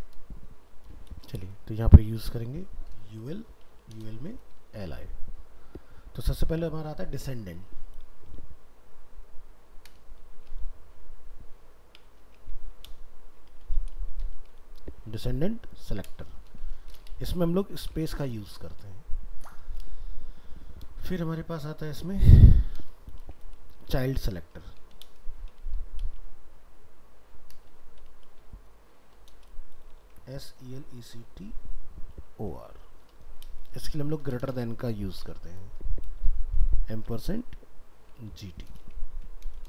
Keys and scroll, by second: 4.1 ctrl+s, 30.0 ctrl+z, 39.1 ctrl+s.